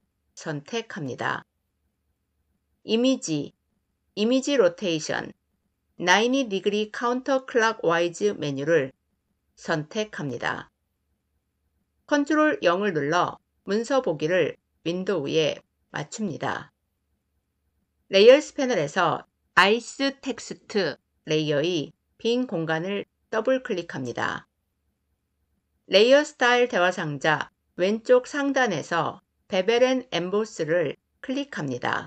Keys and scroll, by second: 11.9 ctrl+0.